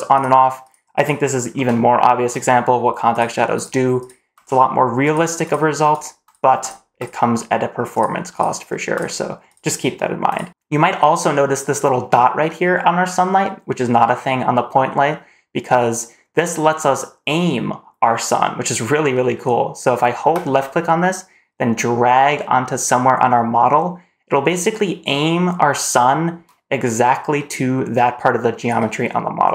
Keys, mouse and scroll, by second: 0.0 click, 0.5 click, 1.4 scroll up 1, 1.6-2.0 shift+middle drag, 3.0 click, 3.4 click, 3.8 click, 4.9 click, 5.3 click, 5.8 click, 6.5 click, 6.8 click, 7.8 click, 8.2 click, 8.8 click, 9.3 click, 10.1 click, 10.4 shift+middle click, 10.4 scroll up 2, 20.2 click, 20.6-28.6 drag.